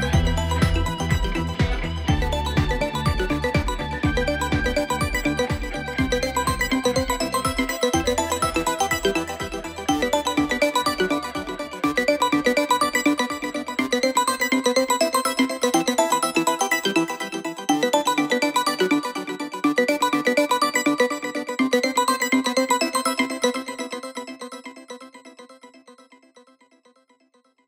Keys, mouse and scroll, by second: 2.8-3.7 drag, 7.7-8.3 drag, 20.0-20.3 alt+scroll up 1, 20.9 space, 21.0 click, 21.3-22.0 space.